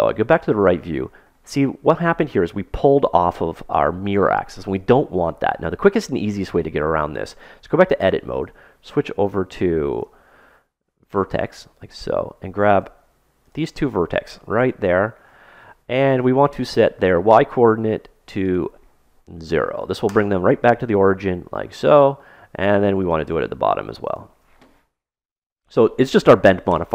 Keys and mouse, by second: 0.6-3.7 middle drag, 7.3 a, 9.9 ctrl+Tab, 11.5-12.7 middle drag, 13.2 middle click, 13.3 right click, 15.2-18.4 middle drag, 18.4-20.2 drag, 21.4-22.9 middle drag, 22.9 click, 22.9-25.9 right drag, 25.5-26.9 drag.